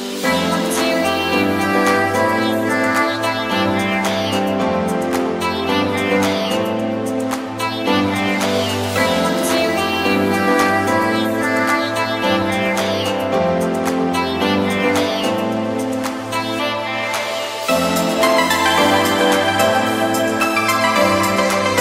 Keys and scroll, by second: 2.8 ], 4.5 [, 6.8 ], 9.7 [, 14.8 ], 19.1 v, 19.5 super+l.